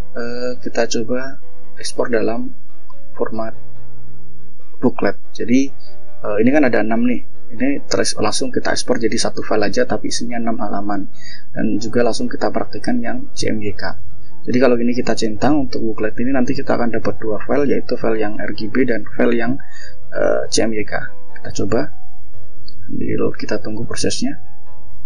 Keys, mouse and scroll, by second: 4.4 click, 8.2 click, 21.2-22.3 drag.